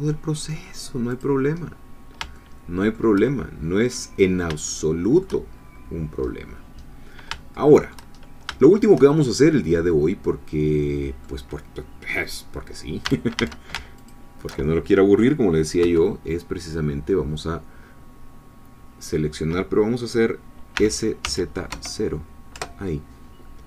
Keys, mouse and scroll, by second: 1.1 click, 1.7-2.2 scroll down 1, 2.3 shift+middle click, 4.1-4.4 scroll down 2, 4.7 shift+click, 5.6-6.9 shift+scroll up 5, 6.9 scroll down 2, 7.5 shift+click, 8.2-8.6 shift+scroll down 3, 8.6 shift+middle click, 9.2-9.9 shift+scroll up 3, 9.9-11.4 middle drag, 13.1 a, 14.0 alt+shift+click, 15.8 3, 20.7 s, 21.2 z, 21.7 0, 22.5 Return.